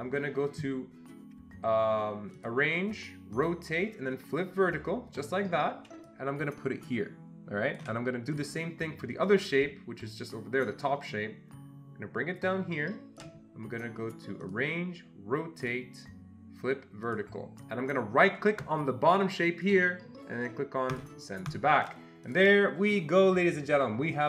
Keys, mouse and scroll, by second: 2.3-3.3 ctrl+shift+drag, 3.3-5.2 ctrl+shift+drag, 6.4-7.9 shift+drag, 11.4-13.3 ctrl+shift+drag, 15.6-17.1 ctrl+shift+drag, 19.7 right click, 20.9 click, 21.5 click, 22.3 click.